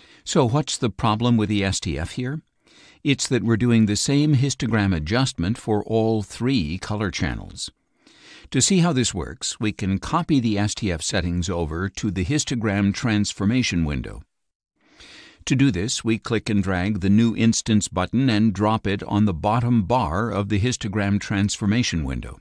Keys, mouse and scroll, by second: 9.9 click, 12.3 click, 15.3 click, 22.0 click.